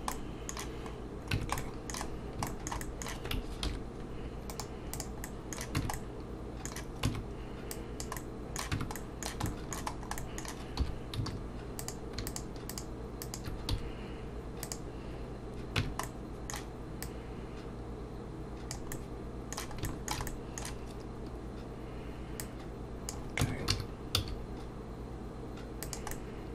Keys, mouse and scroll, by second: 0.1 middle click, 0.9-1.3 scroll down 2, 1.3 Tab, 1.6 middle click, 2.1-2.5 scroll down 3, 2.5 shift+middle click, 2.8 middle click, 3.6 ctrl+2, 4.5 right click, 5.2 middle click, 5.8 Tab, 5.9 middle click, 7.1 Tab, 7.7 click, 8.2 middle click, 8.8 Tab, 9.0 middle click, 9.5 shift+middle click, 9.9 scroll up 2, 10.2 middle click, 10.8 3, 11.8 click, 12.3 shift+click, 13.2 click, 13.7 x, 15.8 Tab, 16.0 middle click, 17.0 click, 18.9 middle click, 19.9 shift+middle click, 20.3 middle click, 22.4 click, 23.4 Tab, 23.7 a, 24.1 s, 26.1 middle click.